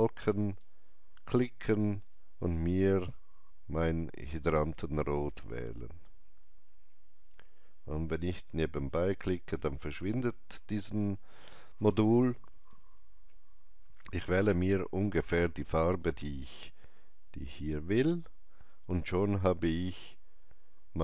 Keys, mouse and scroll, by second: 0.4-7.9 drag, 8.7-11.3 drag, 15.9-21.0 drag, 16.0 alt+right click.